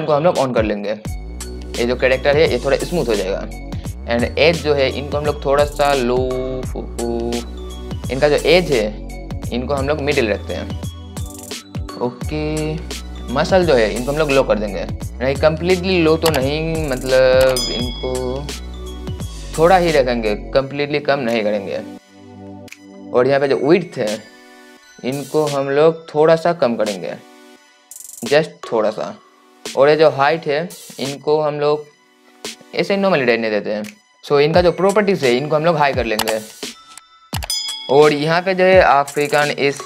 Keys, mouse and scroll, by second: 1.2 click, 4.8-36.3 drag.